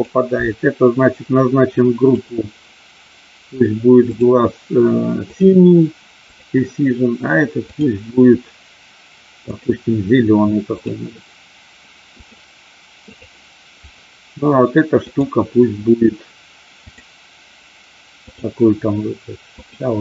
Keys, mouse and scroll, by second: 2.2 click, 4.2-5.5 drag, 9.4 click, 10.7-12.4 drag, 13.1 click, 14.9 click, 16.7 click, 18.2-19.7 drag.